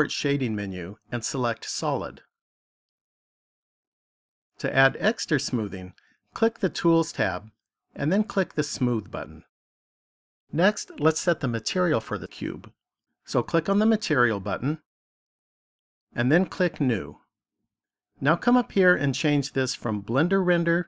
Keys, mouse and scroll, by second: 1.3 click, 6.2 click, 8.5 click, 14.7 click, 16.6 click, 19.9 click.